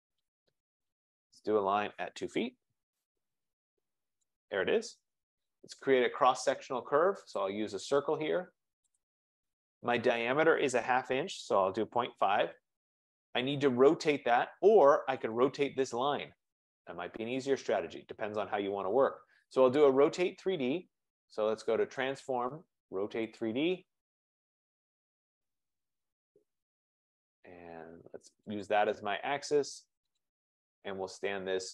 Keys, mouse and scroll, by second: 2.2-3.2 typing, 4.3 click, 5.2 Return, 7.7 click, 9.0 click, 10.9-12.1 typing, 12.2 Return, 13.4-13.9 scroll, 15.6 click, 22.3 click, 23.5 click, 26.2 click, 28.7 click, 30.5 click, 31.3-31.7 scroll.